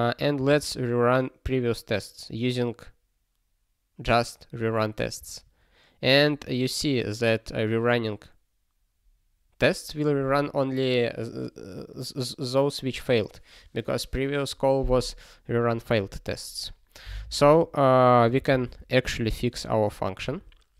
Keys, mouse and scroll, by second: 5.2 ctrl+r, 18.3 ctrl+b, 18.5 ctrl+b, 19.1 BackSpace, 19.5 c, 19.9 ctrl+e.